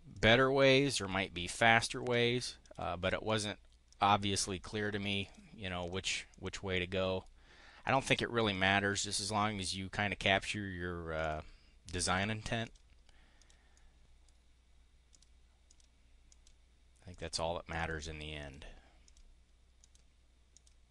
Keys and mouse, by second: 0.0 click, 0.4 click, 1.6 click, 2.5 click, 3.2 click, 3.8 click, 4.4 click, 5.0 click, 5.7 click, 6.2 click, 6.6-6.9 drag, 7.6 click, 8.4 click, 9.0 click, 10.1 click, 11.1 click, 12.0 click, 12.6 click, 13.2 click, 13.6 click, 14.9 click, 15.5 click, 16.2 click, 17.0 click, 17.7 click, 18.3 click, 18.9 click, 19.7 click, 20.4 click.